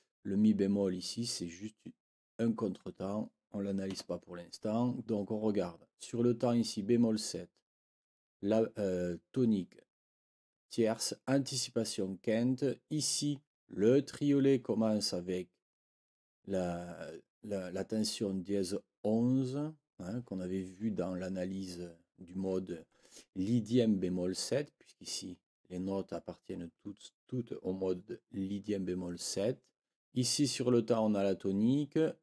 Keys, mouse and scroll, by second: 3.9 Escape.